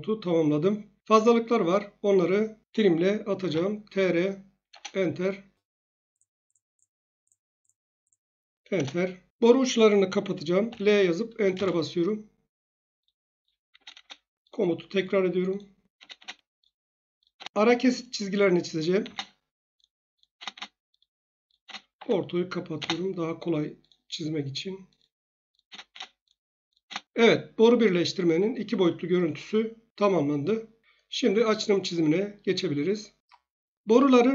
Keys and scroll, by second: 3.1-4.0 typing, 4.7 Return, 8.7 Return, 10.6 1, 11.5 Return, 13.7 space, 13.9 space, 15.9 space, 16.1 space, 17.3 space, 19.0 space, 20.3 space, 20.5 space, 21.6 space, 21.9 F8, 22.7 space, 25.6 space, 25.8 space, 26.8 space.